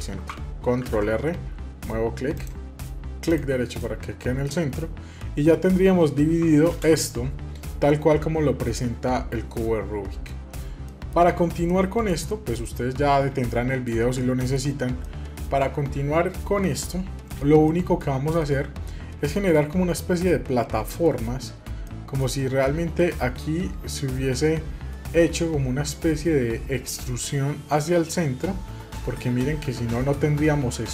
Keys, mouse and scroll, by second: 0.8 ctrl+r, 3.8-6.8 middle drag, 6.8 ctrl+space, 10.3 middle click, 10.9 shift+middle click, 11.3 scroll up 1, 11.7-12.9 shift+middle drag, 14.2 middle click, 15.0 shift+middle click, 16.6 middle click, 17.6 shift+middle click, 18.4 middle click, 20.5 scroll up 4, 21.9 shift+middle click, 29.0 middle click, 30.4 middle click, 30.8 scroll up 2.